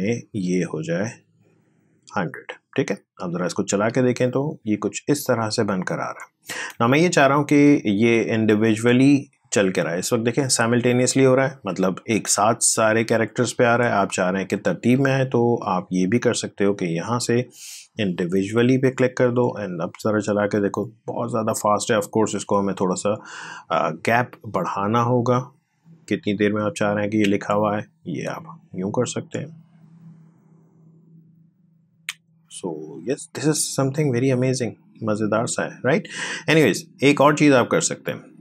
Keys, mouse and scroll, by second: 3.5 space, 6.4 space, 8.2-11.9 drag, 11.9 space, 14.5 space, 15.4 click, 19.0 space, 21.2 space, 22.6-28.0 drag, 28.0 space, 35.1 space, 36.1-38.4 drag.